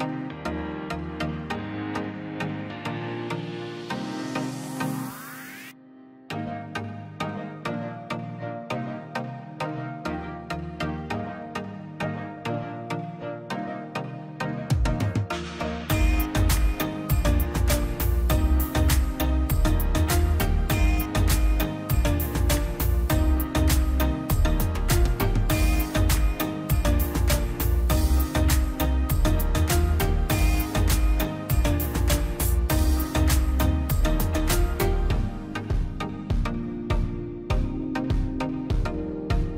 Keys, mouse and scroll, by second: 0.2 Escape, 0.6 space, 0.8 click, 2.3 click, 3.3 click, 3.8 Delete, 4.8 click, 5.8 scroll down 1, 6.3-7.8 drag, 7.8 scroll, 8.1-8.4 scroll up 1, 8.4-9.7 drag, 9.9 scroll up 1, 10.2 click, 11.0 space, 11.2 click, 11.7 Delete, 11.9 scroll down 1, 12.2-12.7 scroll up 1, 12.7 e, 12.9 scroll up 1, 13.2 click, 14.1 scroll, 14.7 click, 15.5 scroll down 1, 16.2 click, 16.5 scroll down 1, 17.2 click, 17.4 scroll down 1, 18.7 click, 18.9-19.2 scroll down 1, 19.6 scroll up 1, 19.9 click, 20.7 scroll down 1, 21.1 scroll up 1, 21.6 click, 22.0 scroll down 1, 22.2 scroll up 1, 22.5 click, 22.6-23.0 scroll down 1, 23.7 click, 23.9 scroll down 1, 25.0 click, 25.1 scroll down 1, 25.3 middle click, 25.7 scroll up 1, 26.0 middle click, 26.3 scroll up 1, 27.0 click, 27.2 scroll up 1, 27.5-29.1 drag, 29.1 scroll down 1, 29.6 middle click, 30.3 click, 30.5 scroll down 1, 30.7-31.2 scroll up 1, 31.4 click, 32.7-33.1 scroll up 1, 33.5 click, 33.6-34.0 scroll up 1, 34.1 click, 36.8 scroll down 1, 37.5 middle click, 37.7 scroll up 1, 38.6 middle click, 38.8-39.3 scroll up 1, 39.4 click.